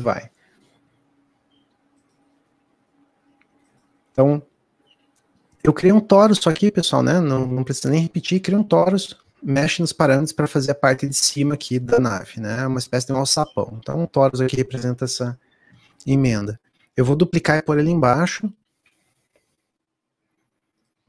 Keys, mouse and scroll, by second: 3.0-10.9 middle drag, 10.9-15.2 shift+drag, 16.0-21.0 middle drag.